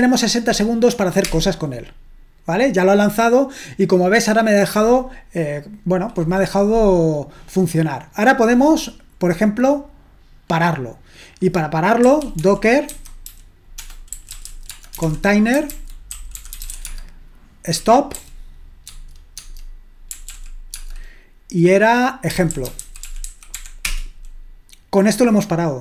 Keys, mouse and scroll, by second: 1.2 Return, 7.7-9.3 scroll down 1, 9.3-11.3 scroll down 1, 11.3-12.4 drag, 11.8-18.1 typing, 18.8 Tab, 19.4 Tab, 19.8-21.2 typing, 22.2-24.0 typing.